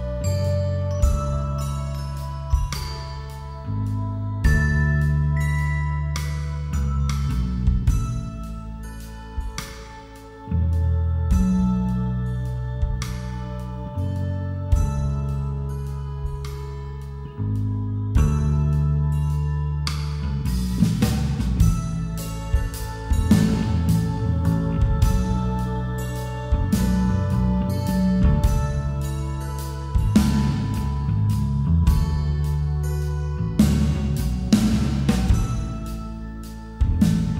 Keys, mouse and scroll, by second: 0.4 a, 0.9 middle click, 1.8 KP_5, 2.0 KP_1, 2.4 KP_5, 4.5-5.7 right drag, 5.5 z, 7.5-9.3 middle drag, 9.3-10.6 right drag, 10.0 a, 12.4 click, 12.9-15.9 right drag, 15.9-17.4 middle drag, 17.4-20.8 right drag, 18.0 ctrl+z, 20.8 middle click, 21.1 g, 23.8-26.9 drag, 24.0 g, 27.3 a, 27.5 z, 28.0 middle click, 28.6-31.5 right drag, 31.5-32.7 middle drag, 32.7-34.0 right drag, 34.0 middle click, 35.3 middle click, 35.4 middle click, 36.1-37.3 right drag.